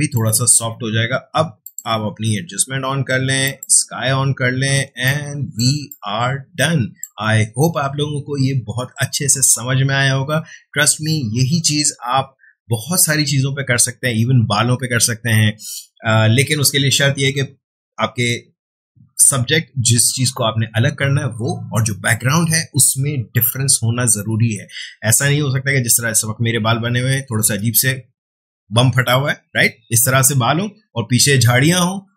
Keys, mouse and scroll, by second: 4.5 ctrl+space, 5.0 ctrl+click, 5.2 ctrl+space, 5.9 click, 6.1 space.